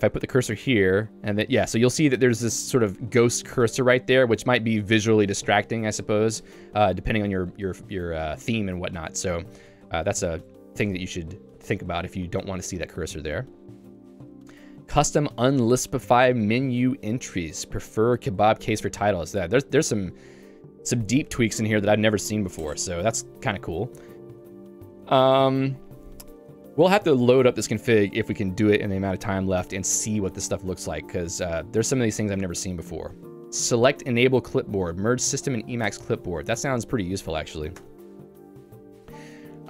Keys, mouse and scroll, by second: 0.2 click, 11.5 j, 14.5 k, 18.4 Escape, 19.2 l, 24.3 j, 31.4 k, 35.9 Escape, 36.1 l, 37.9 Return, 39.5 j.